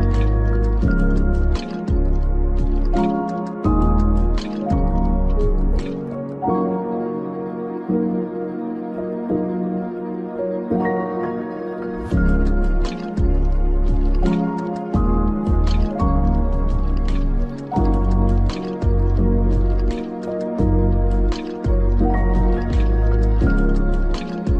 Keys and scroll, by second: 5.5 ctrl+v.